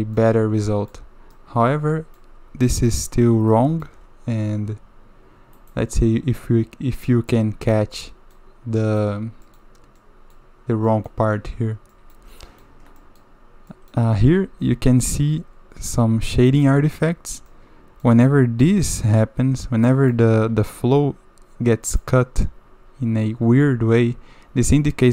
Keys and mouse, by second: 0.2-0.9 drag, 1.3-2.1 middle drag, 2.8 middle click, 3.5 shift+middle click, 5.5 middle click, 7.3-8.3 middle drag, 8.8 middle drag, 9.4 middle click, 10.0 middle click, 10.8 middle click, 11.9 middle click, 12.4 shift+middle drag, 13.0 middle click, 13.7 middle click, 14.2 1, 16.5 middle click, 17.5 middle click, 19.8 middle click, 21.8 middle click, 24.7 click.